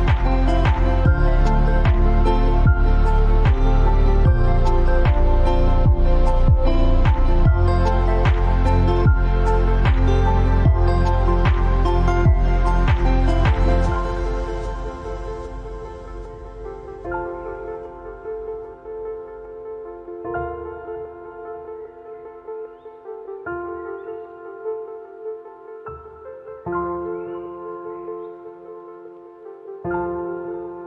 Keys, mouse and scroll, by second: 3.6-6.7 drag, 10.7-11.5 alt+scroll up 2, 11.5-12.0 scroll down 2, 12.0 scroll down 1, 12.7-14.1 alt+scroll up 2, 14.1-14.6 scroll up 1, 14.8 space, 14.8 click, 15.3 space, 16.6-18.3 drag, 18.3 alt+click, 19.0 alt+scroll up 1, 19.3 space, 19.4 click, 19.4 space, 19.5 click, 19.8 t, 20.8 click, 20.9-26.8 typing, 23.6 click, 25.2 click, 26.6 click, 27.0 alt+scroll down 1, 28.0 alt+scroll down 1, 28.0-28.4 alt+scroll up 3, 28.4 click, 28.6 space, 28.8 t, 29.7 click, 29.8 ctrl+a, 30.1 click.